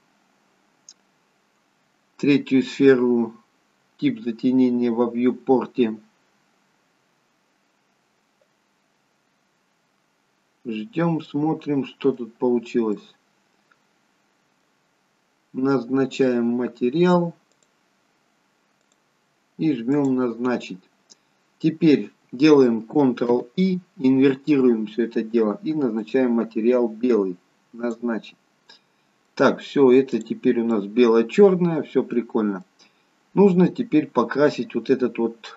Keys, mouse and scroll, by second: 10.8-11.2 scroll down 1, 11.2 middle click, 12.5-14.3 scroll up 3, 13.0 middle click, 14.9-15.6 scroll down 1, 15.6 scroll down 1, 17.8 click, 23.3 ctrl+i, 26.3 click, 29.3 middle click, 30.1 click, 30.7 middle click, 33.8-34.5 scroll up 1.